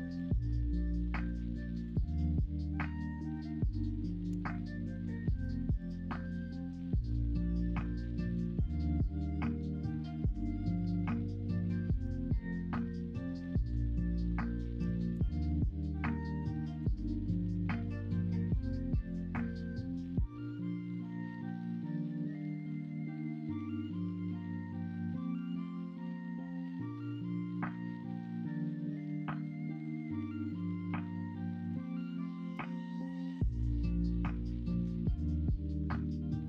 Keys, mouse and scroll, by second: 4.2 g, 6.0 middle click, 6.4 2, 8.6 middle click, 9.7 ctrl+b, 10.8 ctrl+z, 11.4 ctrl+r, 14.7 g, 17.5 2, 17.8 click, 18.9 ctrl+b, 34.4-36.4 middle drag.